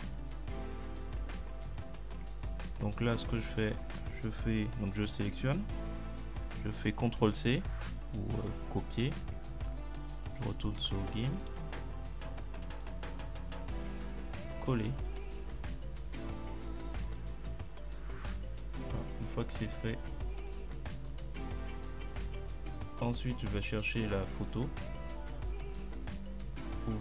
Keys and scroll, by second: 7.2 ctrl+c.